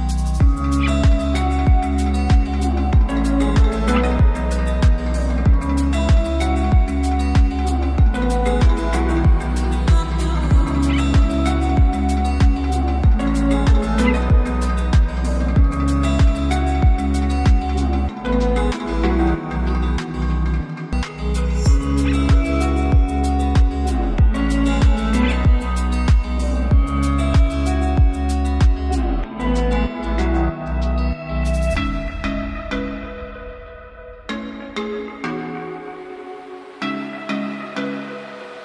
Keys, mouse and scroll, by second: 0.5 click, 4.2-7.9 drag, 16.2-19.5 typing, 20.7-24.8 drag, 25.5-27.0 scroll down 1, 27.0 click, 30.3 click, 37.4-38.6 drag.